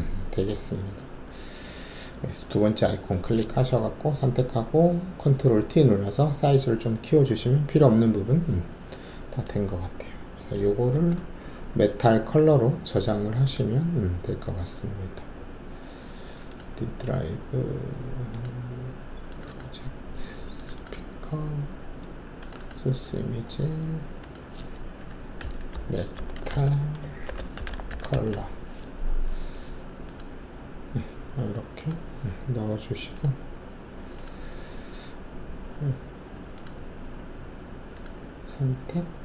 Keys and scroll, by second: 10.9 ctrl+alt+s, 25.4-28.0 typing, 29.5 typing.